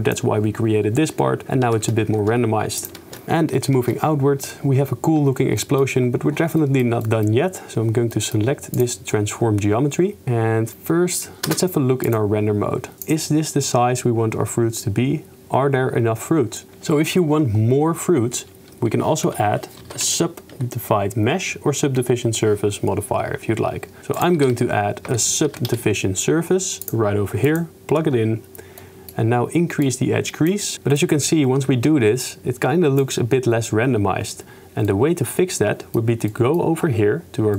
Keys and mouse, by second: 1.8 shift+space, 2.2 shift+space, 2.8 click, 3.1 shift+space, 3.9 shift+space, 5.6 click, 6.7 click, 7.1 click, 8.1 click, 8.7 click, 10.4 shift+space, 11.4 shift+space, 19.1 shift+a, 24.0 shift+a, 24.5 shift+a, 28.9 click, 29.8 click, 31.0-31.9 drag, 31.9-33.1 middle drag, 34.9-36.0 drag, 36.4 click.